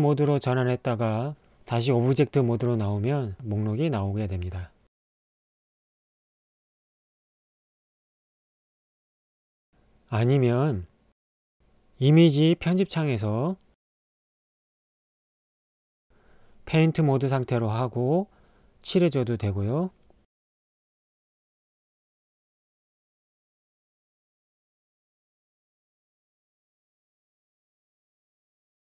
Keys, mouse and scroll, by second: 0.0 click, 3.3 middle click, 4.0 middle click, 4.3 drag, 4.7 click, 5.2 click, 5.6-7.9 drag, 8.2 /, 8.5 middle click, 8.9 middle click, 10.1 Tab, 14.0-16.8 drag, 18.2-20.1 drag, 22.8-24.7 drag, 26.5 click, 27.8 click.